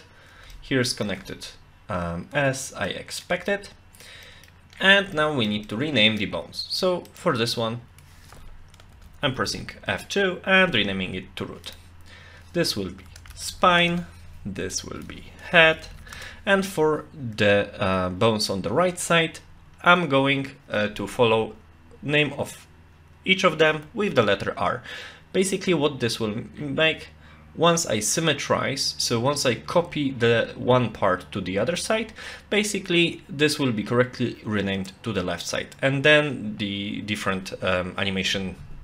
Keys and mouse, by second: 0.5 shift+middle click, 2.9 middle click, 3.5 shift+middle click, 4.2 middle click, 5.1 shift+middle click, 5.7 middle click, 7.1 click, 7.8 F2, 9.4 o, 11.7 click, 12.2 F2, 14.7 click, 14.9 F2.